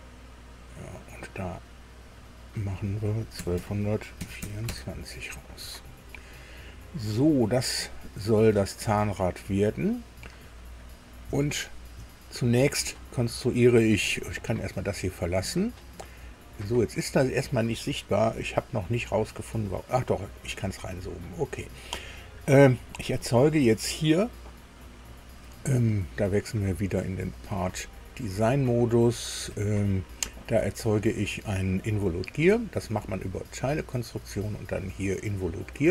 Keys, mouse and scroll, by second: 2.0 click, 3.4 KP_1, 3.6 KP_2, 4.4 KP_4, 4.7 KP_Enter, 5.5-6.1 scroll down 4, 15.0 click, 19.1-19.5 scroll down 2, 20.4 scroll down 2, 21.0 shift+click, 26.4 click, 29.5 click, 33.6 click.